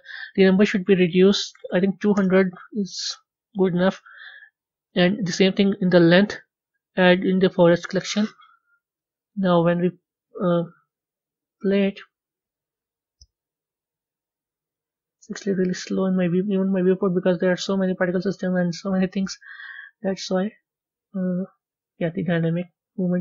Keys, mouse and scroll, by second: 2.1 KP_0, 7.4-8.4 drag, 8.4 scroll down 1, 8.9-11.8 middle drag, 11.8 click, 14.2 scroll down 2, 14.8-16.0 middle drag, 16.0-16.3 scroll up 1, 16.5 scroll up 1.